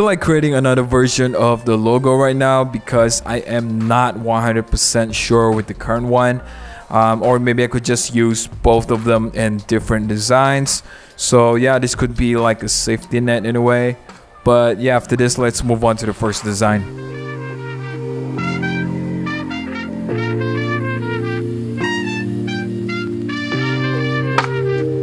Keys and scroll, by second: 1.2 super+=, 1.5 shift+super+o, 5.0 super+=, 9.6 d, 10.6 super+z, 11.7 v, 16.2 super+c, 17.9 super+z, 20.6 super+z, 22.5 super+z, 23.9 super+0, 24.0 super+=, 24.1 super+=, 24.2-25.0 typing.